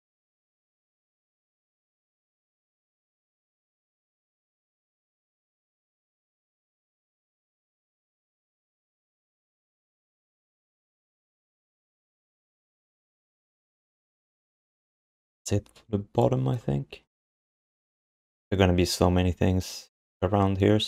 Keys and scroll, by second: 12.1 ctrl+s.